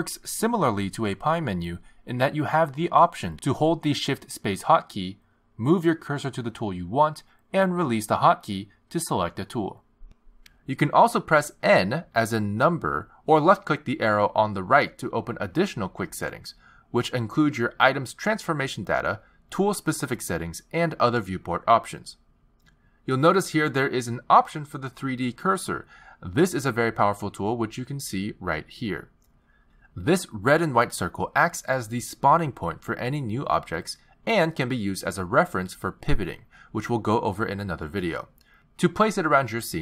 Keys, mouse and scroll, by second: 1.5 shift+space, 5.9 shift+space, 8.3 shift+space, 10.4 shift+space, 13.6 n, 15.1 n, 16.8 click, 20.2 click, 21.3 click, 23.0-23.7 scroll down 3, 27.4 click, 32.6 click, 34.7 shift+a, 38.8 x.